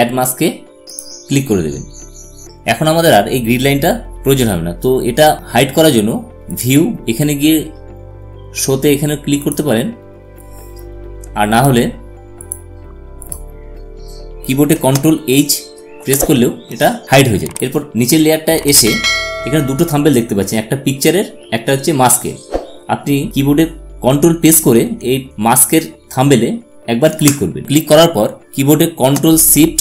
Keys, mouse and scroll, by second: 1.8 click, 7.4 click, 10.3 click, 16.7 ctrl+h, 18.0 click, 25.3 ctrl+Num_Lock, 27.6 ctrl+click.